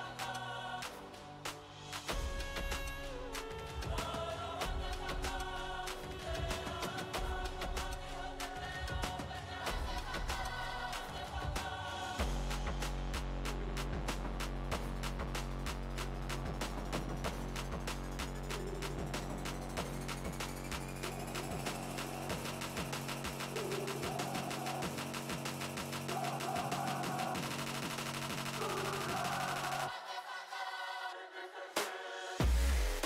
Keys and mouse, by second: 2.5 z, 3.0 z, 3.3 Tab, 5.0 ctrl+r, 7.3-9.4 right drag, 8.1-12.6 drag, 9.8 Tab, 15.3 right click, 15.7 Tab, 18.4 right click, 19.3-20.7 drag, 22.1 ctrl+e, 24.5-25.6 drag, 25.6 ctrl+e, 26.3-27.5 drag, 28.4 click, 29.0-31.8 right drag, 29.4-33.0 middle drag, 30.5-31.8 drag.